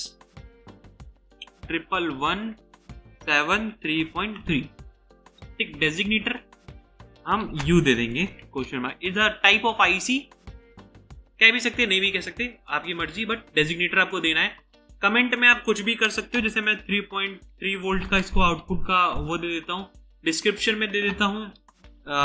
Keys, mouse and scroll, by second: 0.0-0.3 typing, 1.6-4.8 typing, 7.6-8.5 typing, 16.8-19.2 typing, 21.8 Caps_Lock.